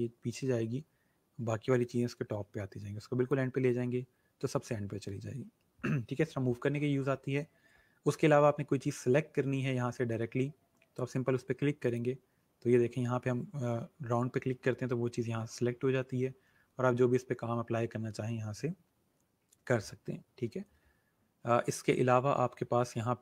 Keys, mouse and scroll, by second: 11.8 click.